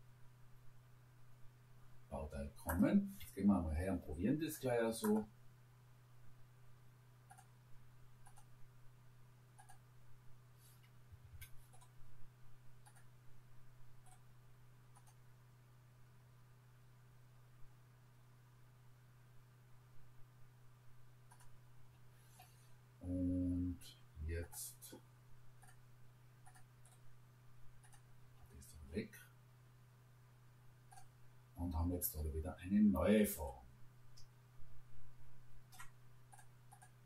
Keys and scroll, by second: 3.4 Escape, 11.1 Escape.